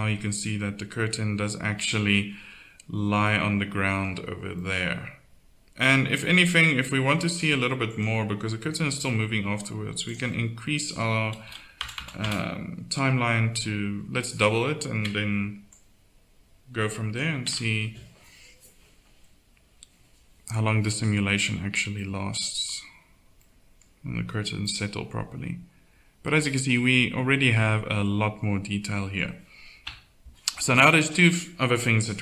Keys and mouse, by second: 1.2-5.4 middle drag, 6.7-7.9 middle drag, 8.7-11.9 drag, 11.9 KP_0, 17.4 alt+a, 25.2-26.7 drag, 29.8 KP_1.